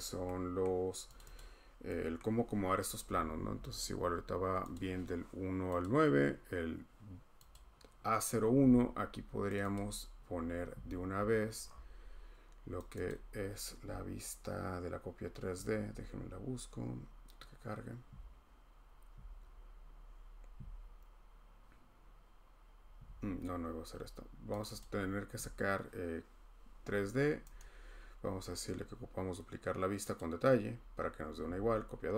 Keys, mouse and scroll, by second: 0.0 scroll, 0.6 scroll, 1.2 click, 1.4 click, 1.5 scroll, 2.1 scroll, 3.5-4.6 scroll, 4.7 click, 4.7 scroll, 5.8 click, 7.5 click, 9.5 click, 9.7 click, 11.1-11.8 scroll, 12.9 click, 13.1-16.8 click, 24.6 click, 24.8 click, 27.6 middle click, 30.2 click.